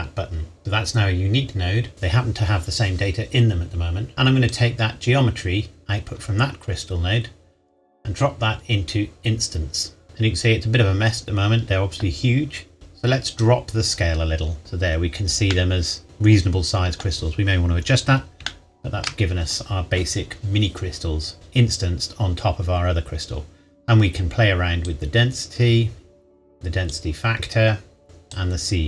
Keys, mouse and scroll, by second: 0.6 click, 1.9 scroll down 1, 4.1 click, 10.3-11.7 scroll down 1, 12.3-13.4 scroll up 1, 13.4 click, 14.8-15.5 scroll up 1, 15.5 middle click, 17.9-18.4 scroll down 1, 18.7 shift+middle click, 23.7-24.9 scroll up 1, 24.9 click.